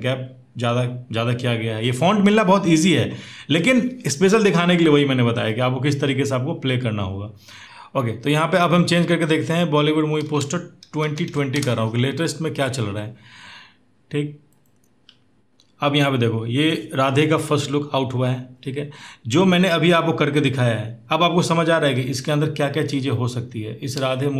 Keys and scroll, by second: 10.3-11.6 typing, 23.7 space.